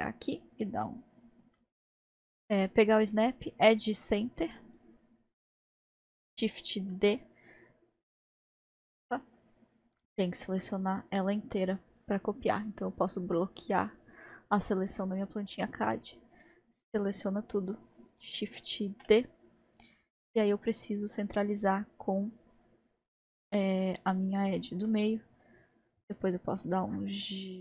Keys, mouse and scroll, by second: 0.2-1.6 scroll down 2, 1.6-3.2 middle drag, 4.5-6.3 drag, 6.9 shift+d, 10.6-14.5 middle drag, 14.6 click, 15.7 drag, 18.9 shift+d, 24.9 middle click, 25.8-27.2 scroll up 1, 27.2-27.6 scroll up 1.